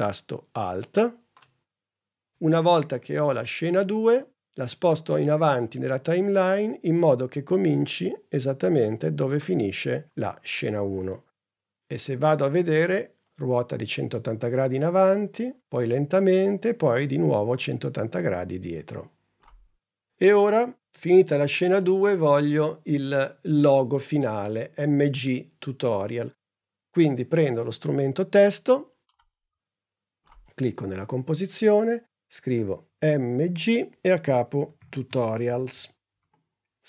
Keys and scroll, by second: 32.8-36.1 typing, 34.0 shift+Return.